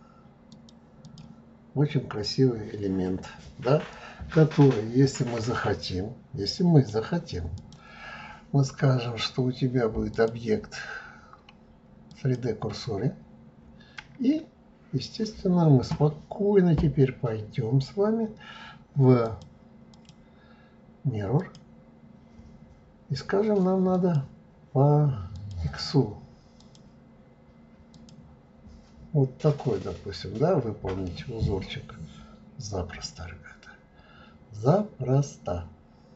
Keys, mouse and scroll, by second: 1.9-3.9 scroll down 2, 3.9-6.9 middle drag, 7.6 click, 10.1-13.2 drag, 13.3-14.0 scroll down 2, 14.0-17.0 middle drag, 19.3 click, 19.9-22.9 drag, 23.9 click, 25.4 click, 26.6 click, 27.9 click, 29.2-29.9 scroll down 2, 29.9-30.9 scroll up 2, 31.1-33.5 middle drag, 33.5-34.6 scroll up 4, 34.6-36.0 scroll down 2, 36.0 scroll down 3.